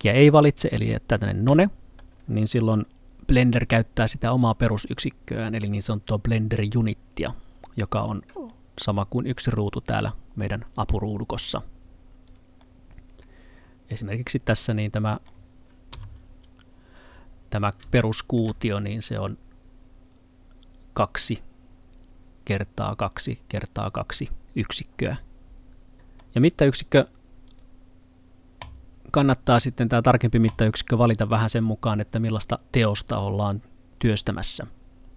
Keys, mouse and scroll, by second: 3.1 n, 8.1 middle click, 11.6-12.3 scroll up 1, 12.3 click, 12.6 middle click, 17.3 scroll up 1, 18.0 middle click, 25.9 middle click, 27.5 click.